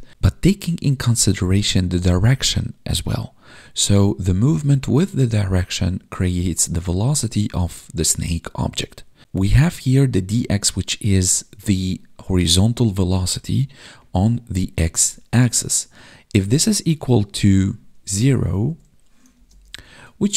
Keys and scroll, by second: 17.3 space, 19.2 space.